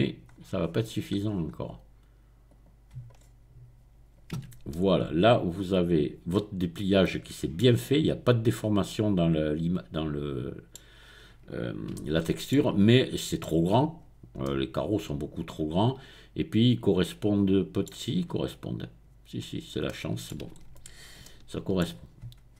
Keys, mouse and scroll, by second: 2.5 click, 3.2-4.0 scroll up 1, 4.5 Tab, 4.8-11.0 middle drag, 11.0-11.7 scroll down 1, 11.9 shift+middle click, 12.8-13.2 scroll down 2, 13.2-13.6 scroll up 2, 14.4-19.4 middle drag, 19.4-19.8 scroll down 2.